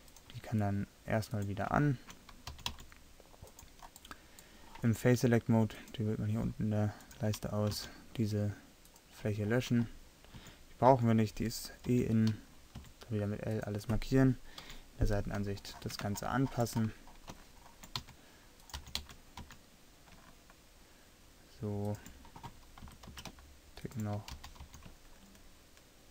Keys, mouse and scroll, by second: 2.6 g, 7.8 x, 10.4 a, 11.0 a, 11.9 l, 12.8 s, 14.7 KP_3, 18.1 s, 18.8 g, 22.9 s, 24.4 g.